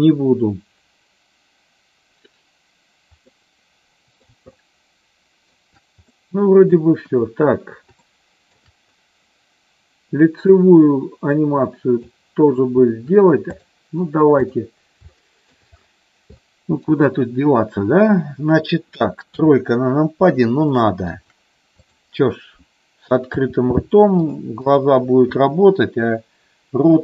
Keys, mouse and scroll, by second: 3.2 middle click, 4.5-5.5 shift+middle drag, 6.0 middle click, 7.0 KP_1, 8.0 shift+middle click, 10.5-12.1 drag, 14.5 click, 15.2 shift+middle click, 16.4 shift+middle click, 19.4 KP_3, 20.8 shift+middle click, 21.6 click, 23.4 e, 24.7 click.